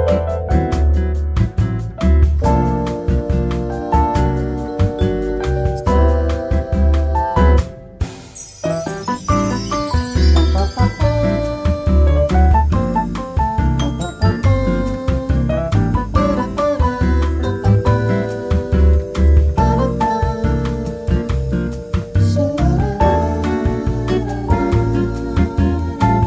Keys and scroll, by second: 1.2 ctrl+z, 1.3 ctrl+z, 1.4 ctrl+z, 1.9-3.3 typing, 10.8-16.6 typing, 18.9 ctrl+z, 19.1 ctrl+z, 19.1 ctrl+z, 25.0 ctrl+z, 25.1 ctrl+z, 25.2 ctrl+z.